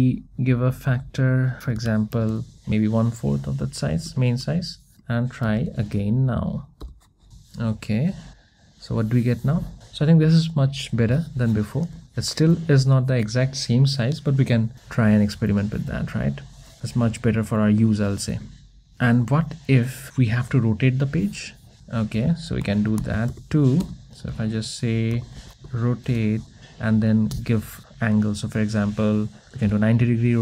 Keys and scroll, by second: 23.9 Return.